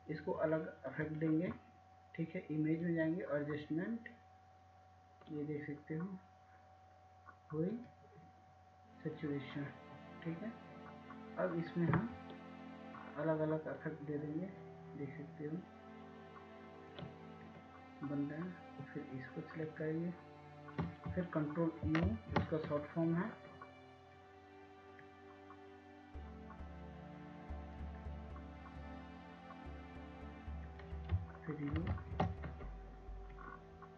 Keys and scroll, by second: 26.7 ctrl+u.